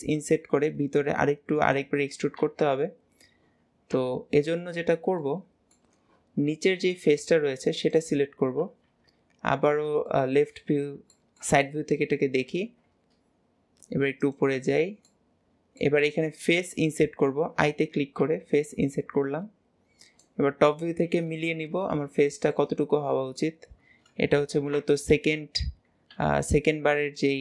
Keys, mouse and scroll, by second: 4.4-7.2 middle drag, 7.2 click, 8.0 click, 8.9 KP_3, 9.7-10.1 scroll up 1, 10.1 shift+middle click, 10.6 scroll up 2, 11.2-12.4 shift+middle drag, 12.4 g, 15.1-18.1 middle drag, 21.8 scroll down 2, 22.3 shift+middle click, 22.8-23.1 scroll up 1, 23.1-24.5 shift+middle drag.